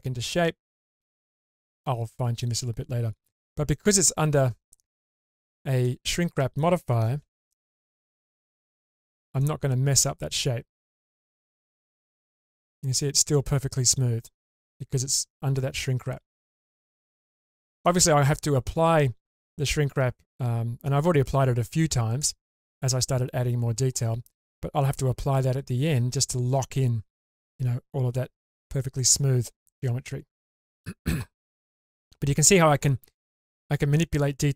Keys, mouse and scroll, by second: 3.2-3.7 scroll down 1, 3.7-4.7 middle drag, 5.8-6.6 middle drag, 7.2 alt+z, 8.5 Tab, 9.3 scroll down 1, 9.4-11.0 middle drag, 11.3 shift+space, 11.8-14.8 middle drag, 16.6-17.2 scroll down 2, 17.2-17.8 middle drag, 28.6-30.0 scroll down 2, 29.0-31.5 middle drag, 31.6-32.0 shift+middle drag.